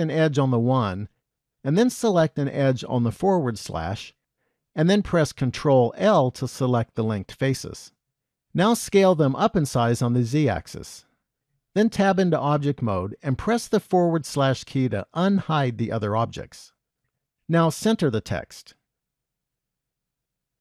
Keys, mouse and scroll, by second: 4.8 shift+click, 6.0 ctrl+l, 8.4 s, 12.1 Tab, 13.8 /, 16.2 KP_1, 17.1 g.